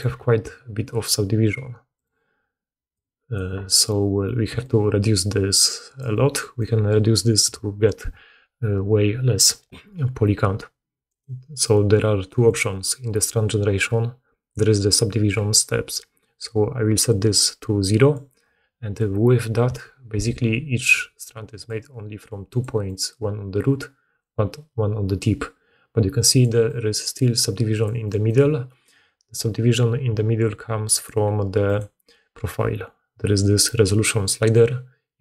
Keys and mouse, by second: 1.8-12.5 drag, 4.4 d, 5.9 d, 6.0 d, 6.5 d, 6.6 d, 17.0-21.3 drag, 20.8-22.7 d, 21.5 click, 21.5 middle click, 21.5 right click, 26.3 d, 26.4 d, 26.5 d, 27.7 d, 27.9 d, 28.2 d, 28.3 d, 28.4-35.0 drag, 29.6-35.0 middle drag, 29.6-35.0 right drag.